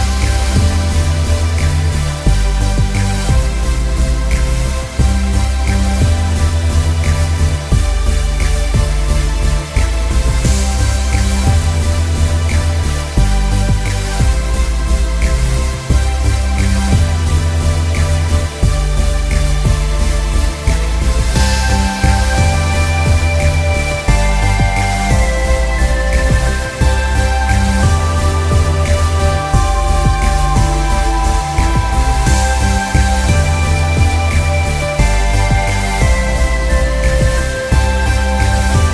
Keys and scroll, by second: 2.4 ctrl+i, 3.7 ctrl+=, 3.8 ctrl+=, 4.0 ctrl+=, 5.3 ctrl+=, 5.5 ctrl+=, 5.7 ctrl+=, 15.1-15.4 typing, 21.4 ctrl+-, 22.4 ctrl+-, 22.5 ctrl+-, 23.8 ctrl+-.